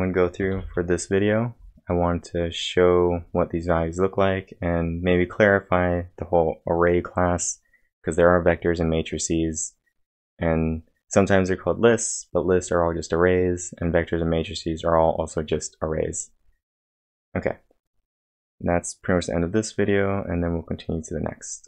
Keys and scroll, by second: 0.5 ctrl+l.